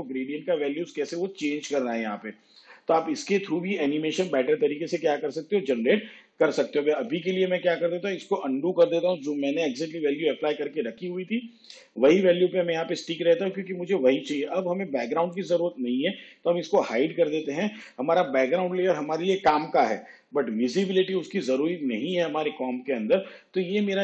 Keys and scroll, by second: 7.2 ctrl+z, 9.8 ctrl+z, 11.1 ctrl+z, 17.6 shift+/.